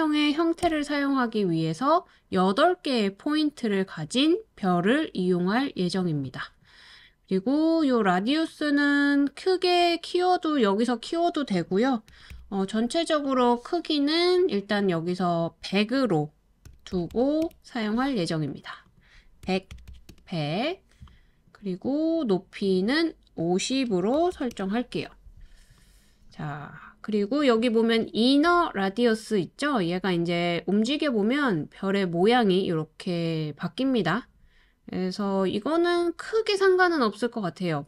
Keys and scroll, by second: 0.7 Return, 11.9-12.8 typing, 16.4-17.6 typing, 19.2-20.4 typing, 21.5-22.2 typing, 24.1-26.4 typing.